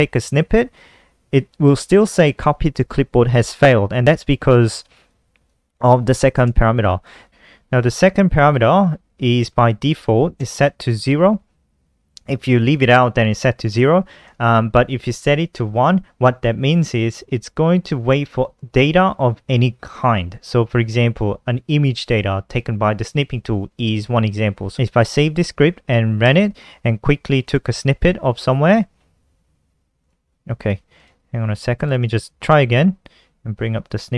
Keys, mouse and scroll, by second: 3.2-3.9 typing, 4.2 click, 5.0 click, 5.7 click, 7.0 click, 7.2 ctrl+alt+r, 10.5 0, 14.2 BackSpace, 14.6 1, 25.0 ctrl+s, 26.2 F5, 27.4 click, 30.0 click, 31.0 click, 31.9 ctrl+s, 33.9 click.